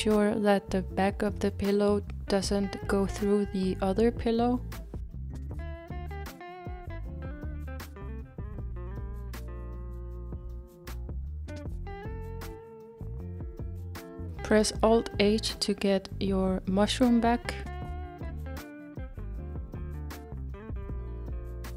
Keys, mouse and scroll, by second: 4.5 click, 5.3-5.7 scroll down 4, 6.4-9.3 middle drag, 9.3-10.2 scroll down 5, 10.2-16.2 middle drag, 16.2-16.9 scroll down 2, 16.9-18.9 middle drag, 18.9 alt+h.